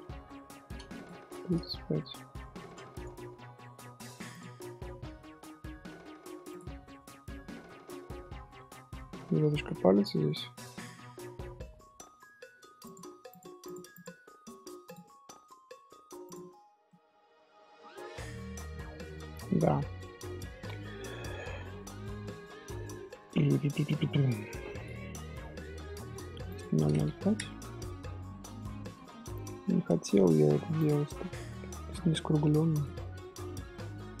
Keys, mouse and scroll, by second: 0.0 ctrl+z, 0.9-2.6 drag, 2.6 middle click, 3.0 Tab, 3.5 middle click, 3.9 3, 4.3 click, 6.8-7.9 middle drag, 7.9-8.8 scroll up 3, 8.1 shift+middle drag, 9.1 Tab, 12.8-15.9 drag, 16.7 scroll down 1, 16.8-19.9 middle drag, 21.0-23.8 middle drag, 23.8-25.7 drag, 25.7 middle click, 26.4 click, 26.8 KP_0, 27.8-30.7 middle drag, 30.7 click, 31.7-33.4 drag, 33.4 Tab, 33.7-34.2 middle drag.